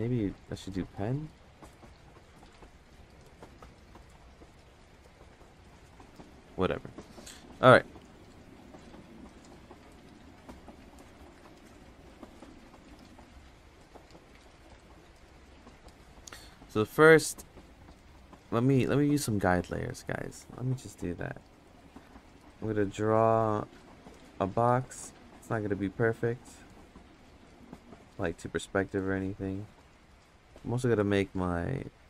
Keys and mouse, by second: 1.7 click, 3.0 ctrl+z, 3.3 click, 4.7 ctrl+z, 5.9 ctrl+z, 10.4-11.6 drag, 11.6 ctrl+z, 13.6 click, 14.3 ctrl+z, 14.7 click, 16.5 ctrl+z, 18.1 click, 18.4 click, 18.8 click, 21.3 click, 22.0 ctrl+z, 22.5 click, 23.1 ctrl+z, 23.5 click, 24.6-25.9 drag, 26.4 click, 27.4 ctrl+z, 27.9 click, 28.8 ctrl+z, 29.2 click, 30.2 ctrl+z, 30.5 ctrl+z, 30.9 ctrl+z, 31.4-32.0 drag.